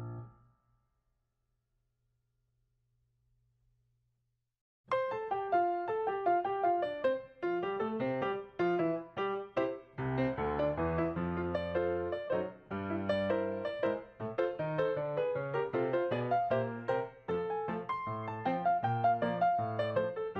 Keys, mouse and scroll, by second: 6.3 right click, 8.1 right click, 8.8 double click, 10.2 double click.